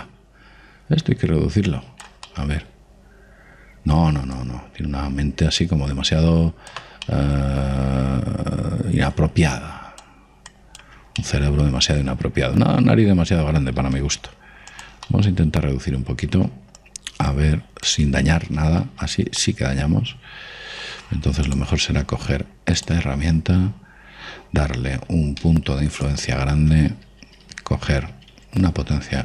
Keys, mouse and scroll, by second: 0.4 click, 3.2-5.3 middle drag, 5.3 click, 8.0-11.7 middle drag, 10.5-13.3 drag, 12.1-13.9 middle drag, 15.0 f, 16.0-17.7 middle drag, 17.8 click, 20.0 ctrl+z, 20.3-22.0 middle drag, 22.4 click, 24.7-27.0 middle drag, 25.9 f.